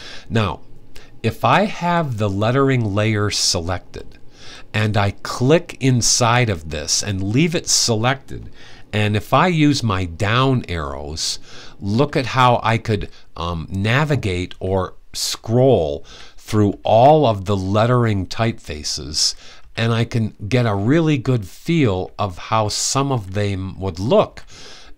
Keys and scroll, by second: 10.1 Down, 11.7 Down, 12.6 Down, 13.5 Down, 14.2 Down, 14.9-20.3 typing, 21.8-24.9 typing.